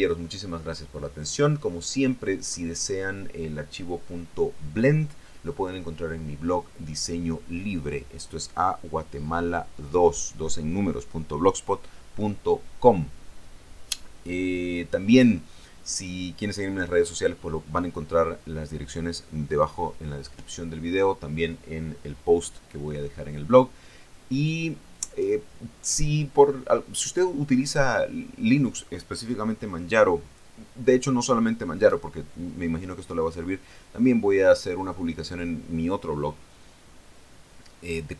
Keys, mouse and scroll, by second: 2.4-27.0 scroll up 2.